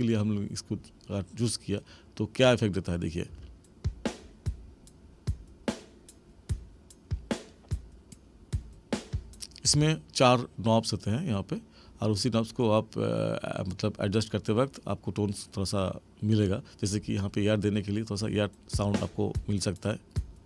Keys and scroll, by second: 3.2 space, 9.6 space, 18.2 space.